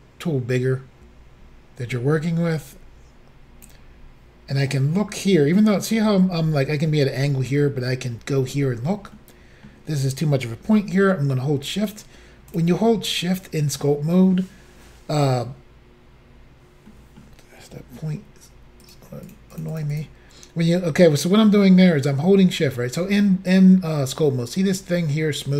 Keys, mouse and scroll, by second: 4.6 middle click, 9.2 middle click, 11.7 shift+click, 12.6 shift+click, 13.1 middle click, 16.9 middle click, 18.8 shift+click, 19.3 shift+double click, 19.5 shift+click, 19.8 shift+double click, 19.9 shift+click.